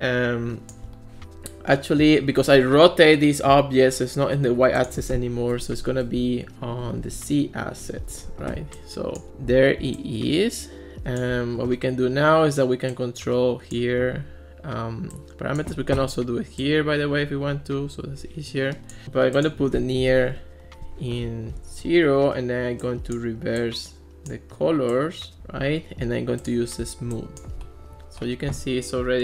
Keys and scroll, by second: 5.6 BackSpace, 5.7 0, 6.0 Return, 7.0 1, 7.2 Return, 20.1 0, 20.3 Return.